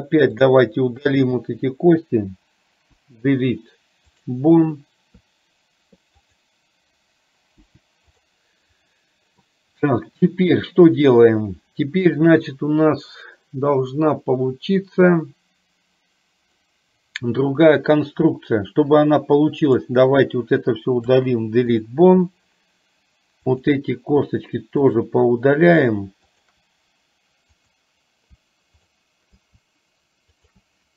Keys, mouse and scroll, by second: 0.6 click, 2.9 Delete, 6.3 click, 7.7 Delete, 19.8 click, 21.1 Delete, 23.4 click, 27.7 click, 28.9 shift+click, 30.3 shift+click.